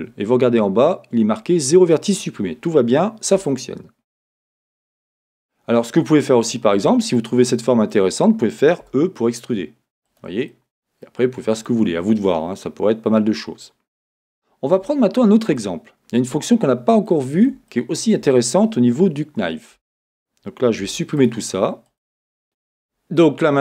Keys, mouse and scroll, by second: 0.0-6.0 drag, 3.4 Tab, 3.7-4.8 scroll down 2, 4.8 scroll up 2, 6.0-10.1 middle drag, 6.7 Tab, 10.1 e, 10.2 click, 11.3 scroll, 13.2-14.4 middle drag, 14.8-17.1 middle drag, 17.7 shift+middle click, 19.8 Tab, 20.8 x, 21.9 click, 22.4 x, 23.2-23.6 middle drag.